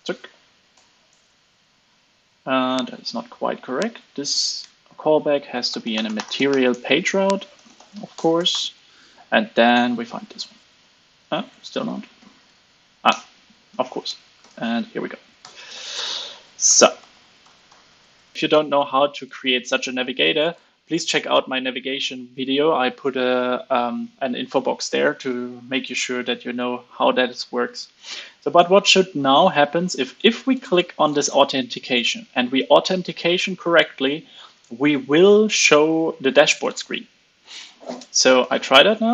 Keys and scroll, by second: 3.6 alt+Up, 3.7 alt+Up, 4.1 alt+Up, 4.5 alt+Up, 5.1 super+x, 9.6 super+v, 11.1 super+z, 12.0 ctrl+space, 14.3 super+v, 15.3 alt+super+l, 15.6 super+s, 18.3 alt+super+l, 18.3 super+s.